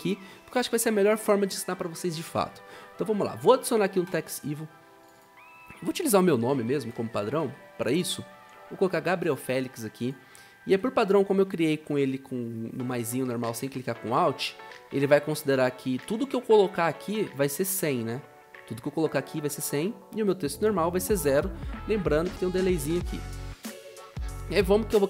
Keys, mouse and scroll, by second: 5.8-7.9 typing.